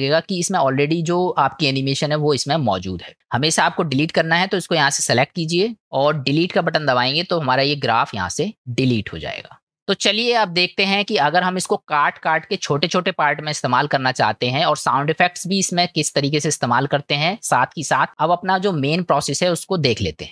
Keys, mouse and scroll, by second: 0.5 click, 3.1 click, 4.4 click, 7.1 Delete, 15.7 click.